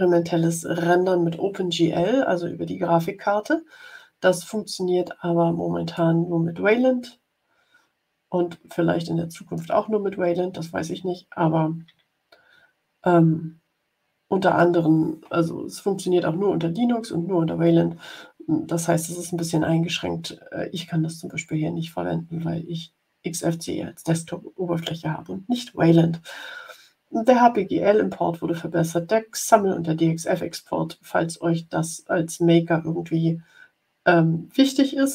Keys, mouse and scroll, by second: 5.9 click.